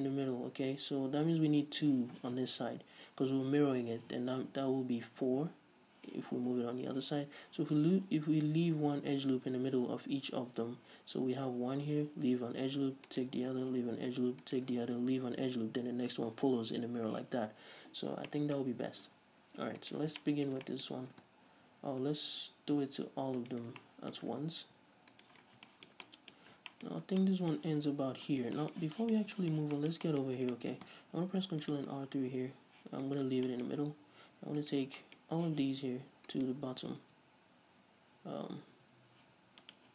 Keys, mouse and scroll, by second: 13.2 alt+shift+right click, 13.3-14.6 middle drag, 14.6-17.8 alt+shift+right drag, 18.4-19.9 shift+middle drag, 19.9-20.3 alt+right drag, 20.3-23.5 shift+middle drag, 23.5 alt+shift+right click, 23.9-25.3 shift+middle drag, 25.3 alt+shift+right click, 25.6 scroll down 2, 25.8-33.3 shift+middle drag, 26.5-26.8 scroll up 2, 27.0-27.3 scroll up 2, 30.4 scroll up 2, 31.3 ctrl+r, 33.3 right click, 33.6-34.7 middle drag, 33.8-34.7 scroll up 2, 34.7 right click, 34.8-36.5 middle drag, 35.6 z, 36.5 ctrl+right click, 37.2 ctrl+z.